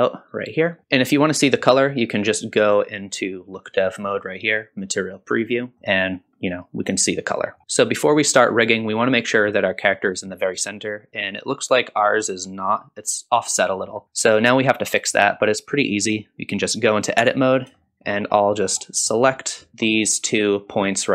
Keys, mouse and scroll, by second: 0.0 click, 0.8 middle click, 5.4 click, 5.7 middle click, 7.4 middle click, 7.6 scroll down 1, 13.9 scroll up 1, 14.0-14.4 scroll down 1, 14.4-15.1 middle drag, 15.4-15.7 scroll up 1, 15.7-16.1 middle drag, 17.2 Tab, 17.5 scroll up 1, 17.8 shift+middle click, 18.3-18.7 scroll up 2, 18.6 middle click, 19.1 middle click, 19.7 shift+click, 20.0 middle click, 20.7 middle click.